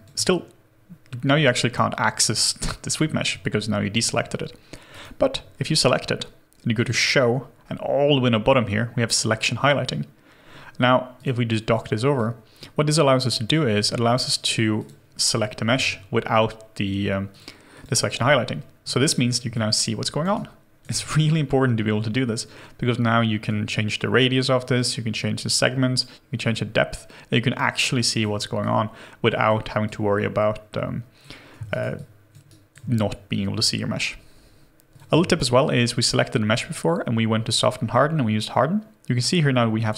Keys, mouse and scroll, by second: 17.7 double click, 19.5 alt+click, 31.6 alt+right click, 31.9 alt+click, 32.4 alt+right click, 34.8 ctrl+z, 34.8 double click, 35.3 shift+right click.